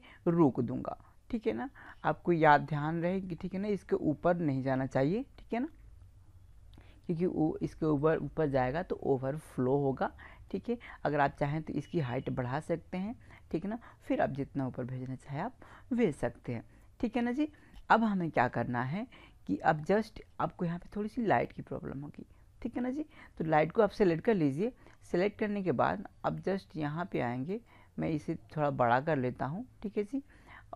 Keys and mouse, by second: 3.2-9.8 middle drag, 16.7-21.4 middle drag, 21.4-23.0 right drag, 23.2-27.5 middle drag, 27.5-30.5 drag.